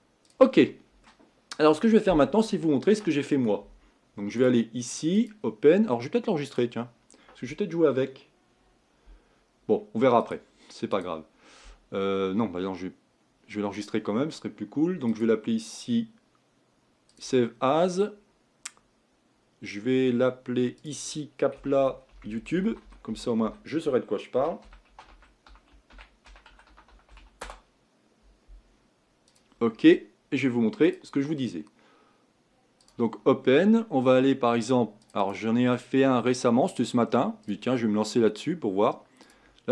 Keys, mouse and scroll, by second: 1.1 middle click, 2.0-5.6 scroll down 1, 17.3-20.8 scroll down 1, 29.5-39.7 drag.